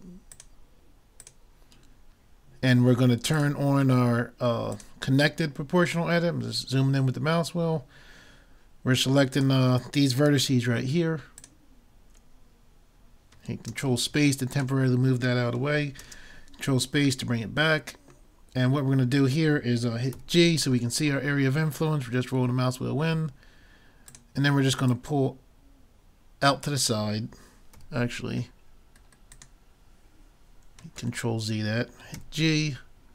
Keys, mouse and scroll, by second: 1.3 click, 3.3-5.3 drag, 5.9-8.0 middle drag, 9.4-11.1 drag, 11.4-13.2 drag, 13.7 ctrl+space, 14.6-16.2 drag, 17.3 middle click, 20.1 g, 24.9-26.6 drag, 27.8 g, 31.0 ctrl+z, 32.2 g.